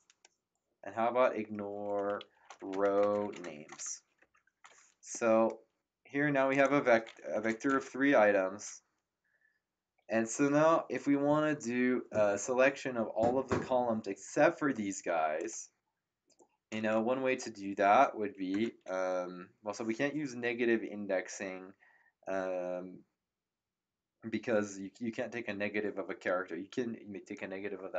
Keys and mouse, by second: 2.1-4.0 typing, 4.2 ctrl+Return, 6.5 click, 7.1-8.1 typing, 15.3 click, 18.5 Return.